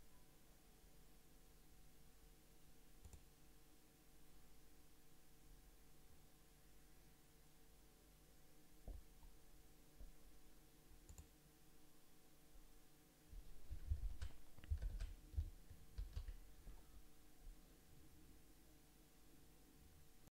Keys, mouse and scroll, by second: 14.1 ctrl+s, 15.1 ctrl+s, 16.0 ctrl+q.